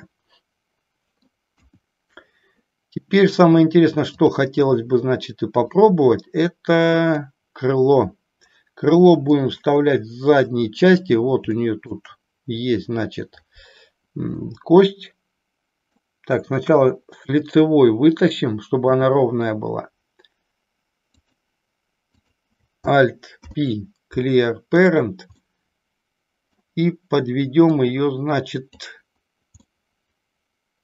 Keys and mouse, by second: 1.6 KP_1, 5.7-7.2 drag, 9.3-10.9 middle drag, 11.8 shift+middle click, 14.3-15.9 middle drag, 16.7 KP_1, 18.8 e, 21.3 click, 23.4 alt+p, 25.4-26.6 middle drag, 27.6-28.8 drag, 29.7-30.8 middle drag.